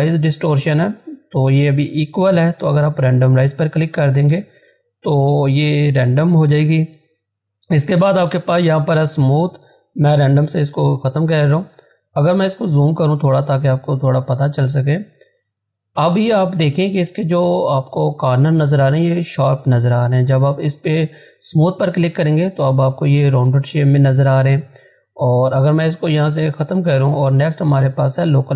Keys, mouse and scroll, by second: 3.5 click, 10.1 click, 11.8-12.6 scroll up 1, 17.5 scroll down 1, 20.5 click, 25.3 click, 25.3 click.